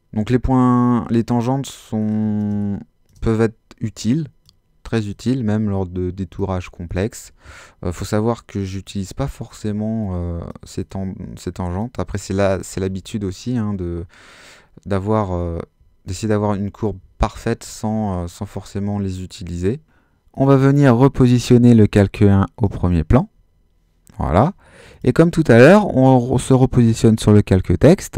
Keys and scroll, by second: 2.5 alt+space, 13.0 alt+space, 16.4 super+z.